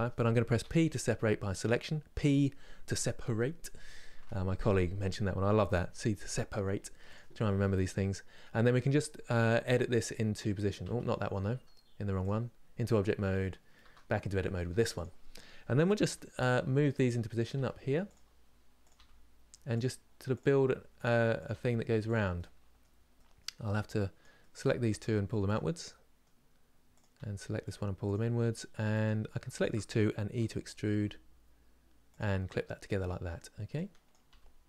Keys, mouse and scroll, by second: 7.5-9.4 middle drag, 9.4 1, 11.2 Tab, 11.9 click, 13.5 Tab, 14.7 click, 15.8 g, 17.1 click, 17.2 g, 18.6 click, 18.6 g, 20.1 click, 20.1 g, 21.1 click, 21.2 g, 22.0-23.9 middle drag, 23.9 click, 24.1 middle click, 24.6 g, 25.5-26.7 middle drag, 26.7 click, 26.9 g, 27.8 click, 27.9 g, 29.3 shift+click, 30.6 e, 32.1-33.8 middle drag, 33.8 click, 34.0 g.